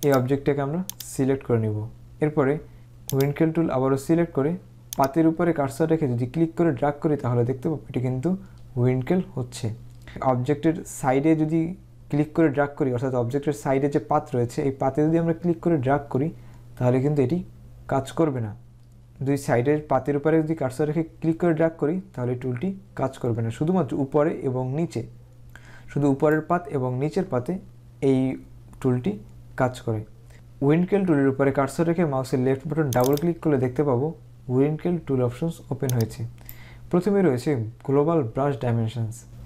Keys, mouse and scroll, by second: 0.2 click, 3.3 click, 5.0 click, 27.6 click, 33.1 click, 36.0 click.